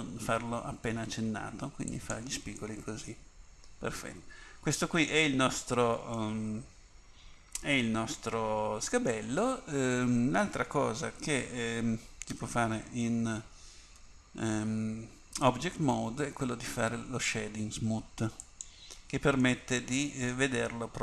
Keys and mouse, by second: 12.4 Tab, 14.0 Tab, 18.4-20.3 drag, 19.7 right click, 20.3 middle click.